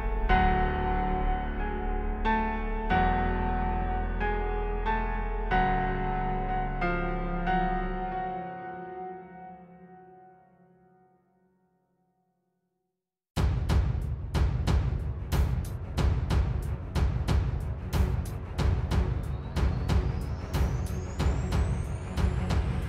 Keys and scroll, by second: 8.3 space, 8.6 space, 8.9 space, 11.9 super+z, 12.8 super+z, 16.4 space, 17.1 super+space, 20.5 ⟲, 20.6 space, 21.4 space, 21.6 space.